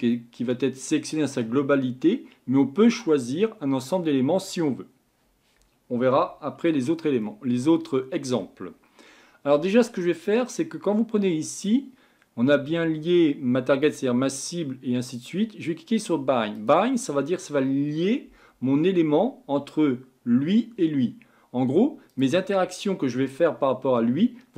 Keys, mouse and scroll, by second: 0.1-10.2 middle drag, 16.5-19.6 drag, 22.1 click.